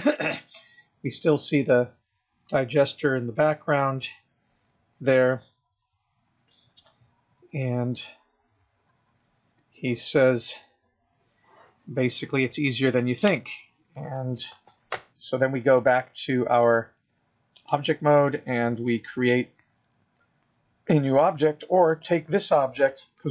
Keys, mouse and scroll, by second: 2.3 click, 2.4 click, 2.9 click, 3.6 click, 4.0 click, 4.9 click, 5.0 click, 5.6 click, 6.5 click, 7.7 click, 8.9 click, 9.8 click, 10.7 click, 16.9 click, 22.1 click.